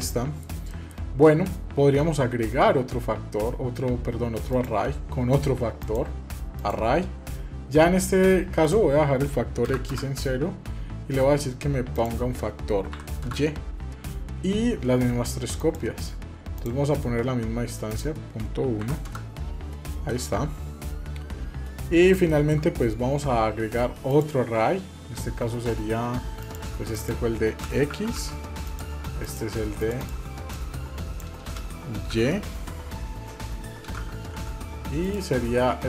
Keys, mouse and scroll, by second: 0.2 scroll down 1, 0.5 middle click, 4.3 click, 6.5 click, 8.4-10.2 drag, 11.7-13.5 drag, 15.4 click, 16.3-19.5 drag, 19.9-21.9 middle drag, 22.0 shift+middle click, 22.4-22.9 scroll up 1, 23.9 click, 26.2-28.5 drag, 29.0-34.9 drag.